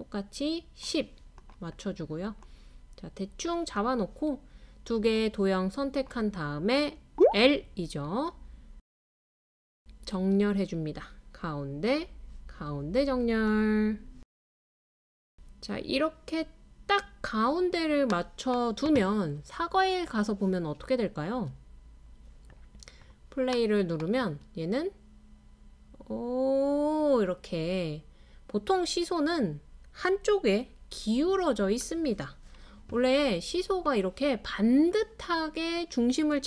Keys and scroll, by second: 7.4 typing, 10.1 typing, 14.9 typing, 17.1 typing, 18.8-19.5 typing, 21.6-25.7 typing, 34.5-35.2 typing.